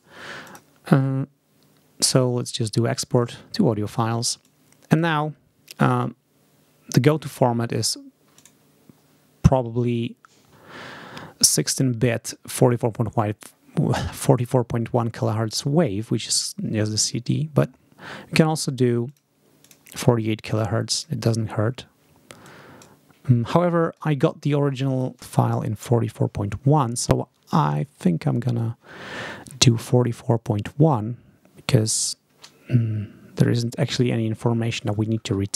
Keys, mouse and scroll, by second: 0.3 click, 3.1 click, 4.3 click, 8.3 click, 18.9 click, 19.5 click, 20.4 click, 22.3 click, 23.8 click.